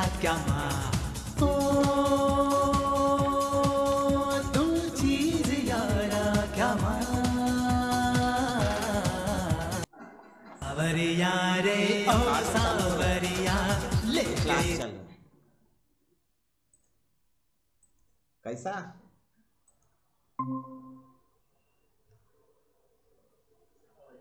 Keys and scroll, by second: 0.0-4.4 typing.